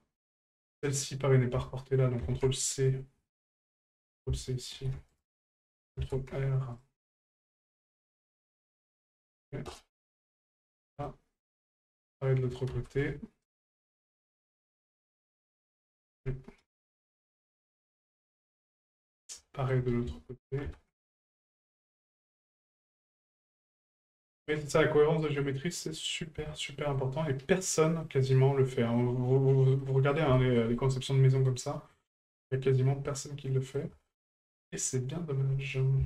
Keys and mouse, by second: 0.8 right click, 4.3 ctrl+click, 8.0-9.8 drag, 10.6 shift+middle click, 11.0 middle click, 15.4-17.0 ctrl+drag, 17.4 middle click, 18.6 shift+middle click, 19.4 shift+middle drag, 22.0-23.1 drag, 24.2 shift+middle click, 25.2 middle click, 25.8 middle click, 26.5 shift+middle click, 26.9 middle click, 28.0 middle click, 29.8 middle click, 30.3 shift+middle click, 30.7-31.5 middle drag, 31.9 middle drag, 33.1-33.8 middle drag, 34.0-34.4 shift+middle drag.